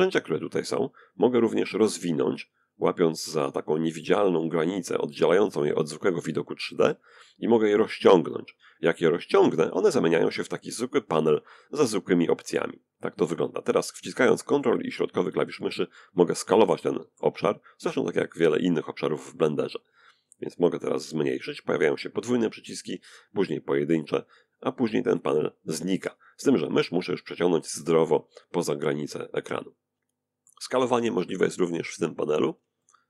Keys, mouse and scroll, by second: 1.6-2.7 drag, 5.9-8.9 drag, 11.1-16.3 ctrl+middle drag, 19.0-29.1 drag, 29.4 ctrl+middle click, 31.0 click, 31.5-33.0 ctrl+middle drag.